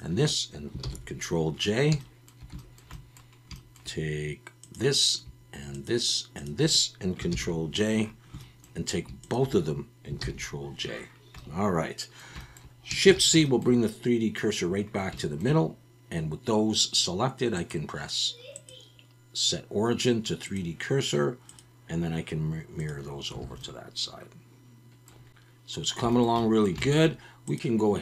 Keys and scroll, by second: 0.8 ctrl+j, 7.3 ctrl+j, 10.2 ctrl+j, 13.0 shift+c, 23.4 alt+a.